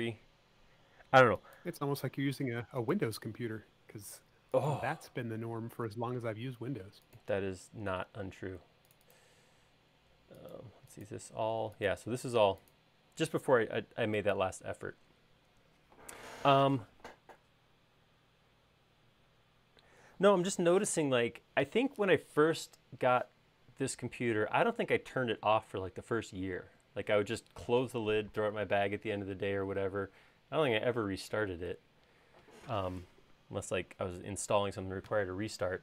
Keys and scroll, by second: 5.4 super+s.